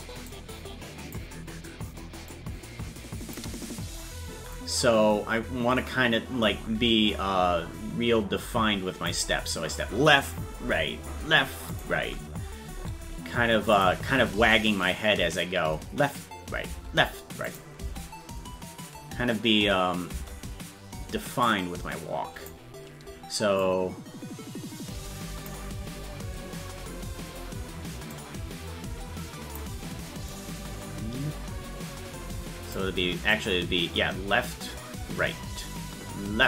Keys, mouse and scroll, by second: 0.3 click, 2.3-3.3 drag, 4.5-9.2 drag, 11.7 click, 13.7 click, 14.4 space, 17.5 click, 17.5 space, 17.8 space, 21.5-22.5 drag, 21.5 space, 23.6-25.5 drag, 28.1-29.6 drag, 30.3-32.7 drag, 33.3-36.4 drag.